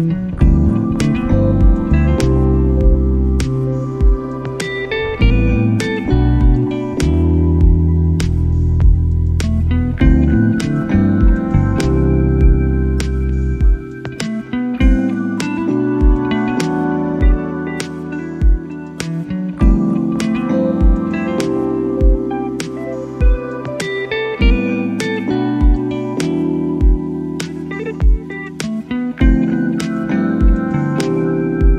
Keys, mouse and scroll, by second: 0.3 middle click, 1.5 click, 2.0 middle click, 2.6-3.7 drag, 6.5 shift+a, 7.8 middle drag, 10.1 middle drag, 12.6 click, 13.3 click, 14.2 middle click, 17.5-18.7 drag, 18.9 middle click, 20.5 h, 20.8-21.5 right drag, 21.5 h, 21.8 middle drag, 23.9-27.9 drag, 29.4 click, 29.5 click, 29.7 click, 30.0 click, 30.2 click, 30.4 click, 31.1 middle click.